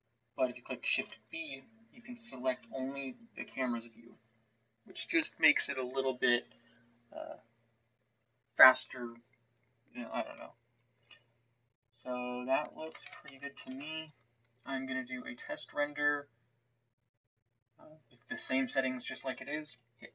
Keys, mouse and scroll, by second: 0.9 shift+b, 12.9 shift+z, 13.7 ctrl+s.